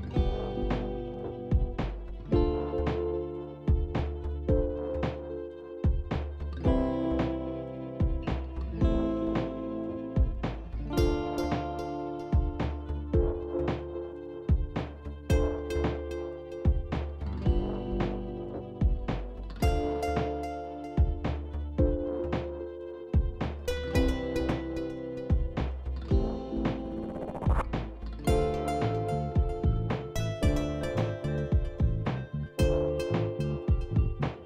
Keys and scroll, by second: 1.4 ctrl+z, 1.7 ctrl+z, 5.3 ctrl+z, 5.8 ctrl+z, 6.6 z, 22.1 z, 29.5 e.